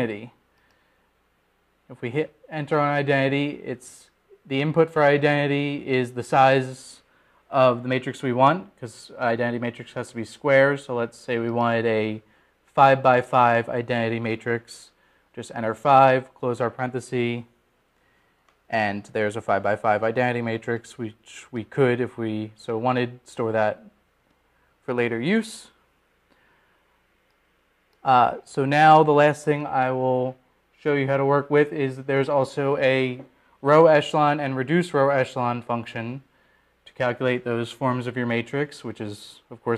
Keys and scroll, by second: 0.2 Down, 1.5 Down, 3.3 Return, 14.3 5, 16.0 ), 18.9 Return.